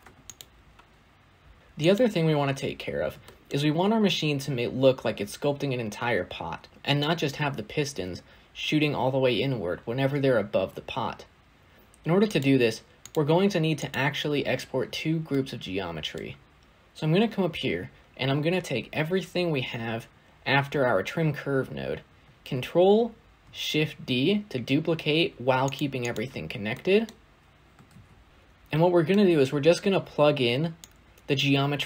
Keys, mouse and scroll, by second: 0.2 click, 1.6 click, 1.8 click, 2.7-3.1 scroll down 1, 3.1-16.6 shift+middle drag, 16.6 ctrl+z, 23.6 ctrl+shift+d, 27.8 ctrl+z.